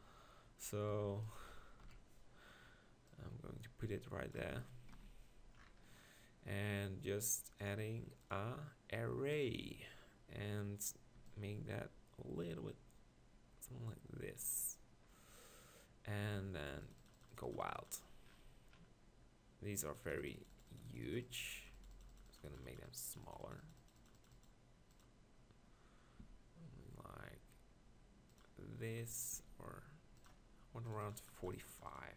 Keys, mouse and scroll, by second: 0.9 g, 1.3 click, 1.8 KP_1, 4.9 ctrl+KP_Decimal, 10.1-11.3 middle drag, 13.5-15.0 middle drag, 19.9-23.5 middle drag, 26.2 s, 29.3 s.